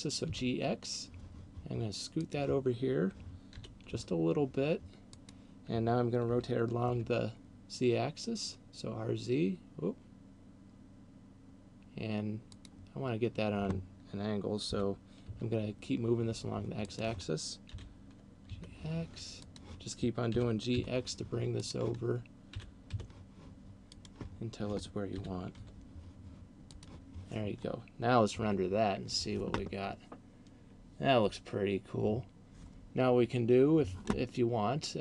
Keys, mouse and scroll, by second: 2.3 click, 3.5 g, 5.3 click, 6.3 r, 12.5 click, 14.5 g, 17.0 click, 17.5 g, 19.5 click, 20.3 g, 21.5 click, 22.5 g, 24.0 click, 25.3 g, 27.0 click.